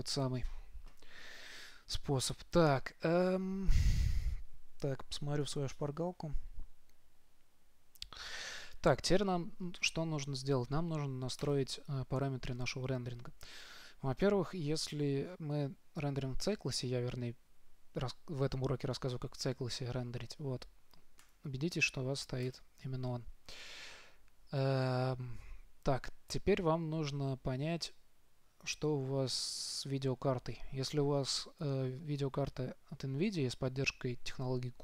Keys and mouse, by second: 0.0 Return, 2.9-11.7 middle drag, 11.7-13.6 drag, 21.5-23.5 drag.